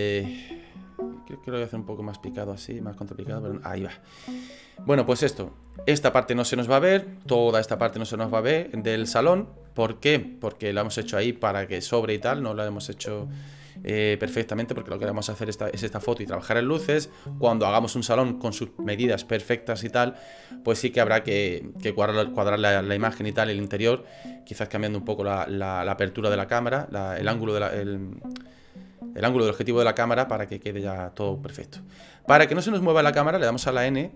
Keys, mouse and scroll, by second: 1.2 middle click, 2.6 shift+middle click, 33.7 n.